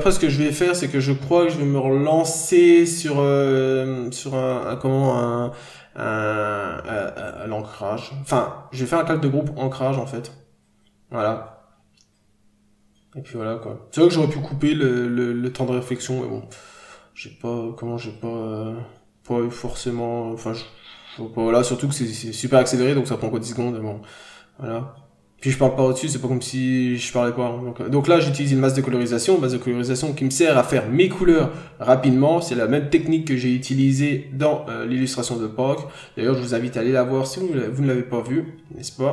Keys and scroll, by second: 14.8 n, 15.2 scroll down 1, 17.5 n, 17.7-18.1 scroll up 1, 21.7-22.1 scroll down 1, 22.2 n, 22.7 b, 23.5 n, 24.3-24.7 scroll down 1, 24.8 ctrl+z, 26.2-26.6 scroll up 1, 29.5 ctrl+z, 30.1 n, 31.0 n, 32.8 n, 33.3 scroll up 1, 34.0 b, 34.8 n, 35.1 b, 37.2-37.5 scroll down 1, 37.5 n, 39.0 n.